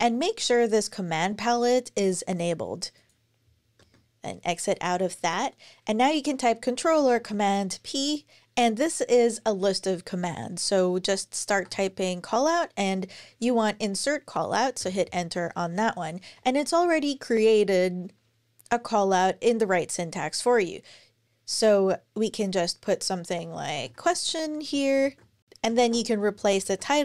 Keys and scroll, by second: 3.6 ↻, 6.9 super+p, 10.5-13.5 typing, 14.6 Return, 23.2-26.1 typing, 24.5 super+Right, 24.8 alt+shift+Left, 26.2 Down, 26.5 alt+shift+Left.